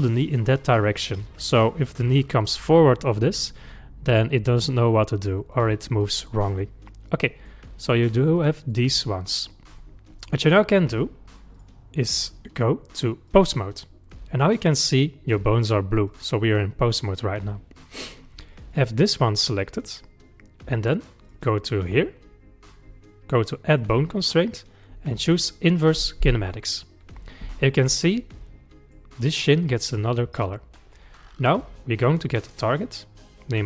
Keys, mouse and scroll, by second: 0.1 click, 5.5-8.4 middle drag, 8.4 click, 8.9 middle click, 9.8-10.3 scroll down 3, 10.6-11.6 middle drag, 11.6 click, 11.6-12.6 scroll down 1, 12.6-14.5 drag, 15.6 click, 16.1 click, 16.4 click, 17.1-18.7 middle drag, 18.7 click, 21.3 click, 23.7-26.9 drag, 27.8-28.2 scroll up 4, 28.4-31.4 middle drag, 32.7 click.